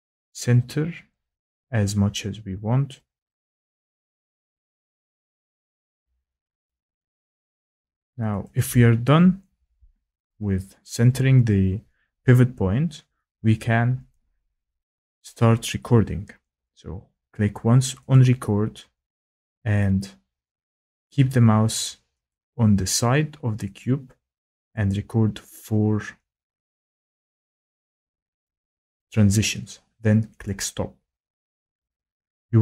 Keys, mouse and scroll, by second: 0.2 click, 2.8 click, 5.3 click, 6.9 click, 7.7 click, 8.5 click, 18.1 click, 19.8 click, 21.0 click, 22.3 click, 23.8 click, 30.4 click.